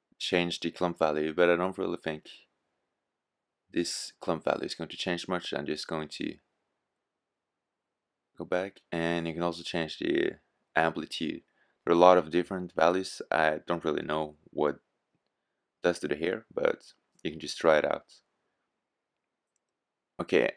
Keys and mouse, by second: 5.7-7.2 drag.